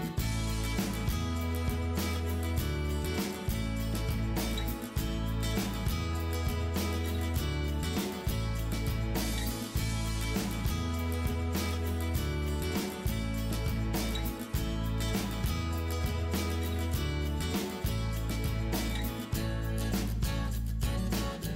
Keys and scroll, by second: 1.8 Delete, 2.8 ctrl+=, 2.9-3.9 typing, 6.5-7.3 typing, 7.9 ctrl+[, 10.4 [, 11.0 [, 15.0 ].